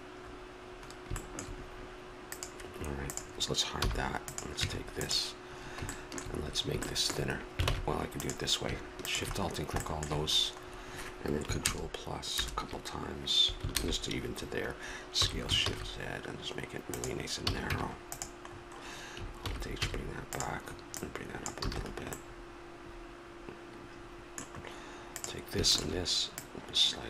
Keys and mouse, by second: 1.2 middle click, 2.2-3.8 drag, 3.8 h, 4.6 Tab, 5.9 click, 6.4 middle click, 7.7 ctrl+Tab, 9.4 click, 10.3 middle click, 11.6 ctrl+KP_Add, 15.1 s, 17.4 a, 17.7 Tab, 19.4 alt+h, 19.8 a, 20.3-21.4 right drag, 21.4 click, 21.7 a, 22.3 middle click, 25.2-27.0 drag.